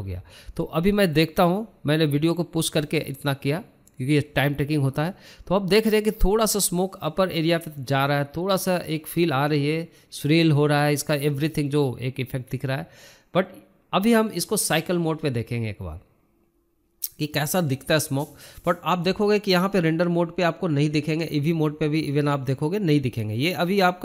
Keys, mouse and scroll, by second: 3.1 drag, 10.6-11.6 scroll up 15, 11.7-18.8 drag, 20.0-24.0 drag.